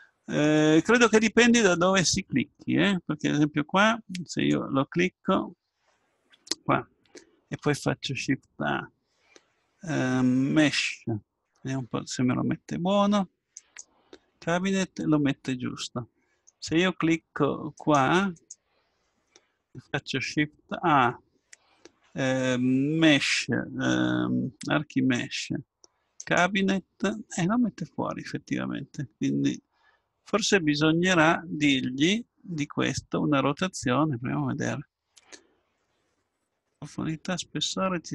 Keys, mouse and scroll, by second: 1.5-4.4 middle drag, 4.4-6.3 drag, 8.5 shift+a, 14.6-16.4 middle drag, 17.8 right click, 19.7 shift+a, 37.5-38.1 scroll down 1.